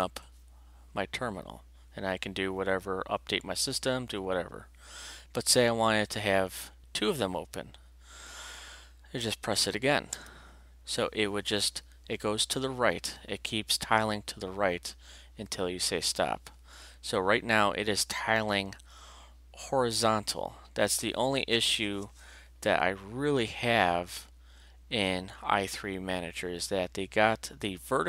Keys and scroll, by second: 10.1 alt+Return.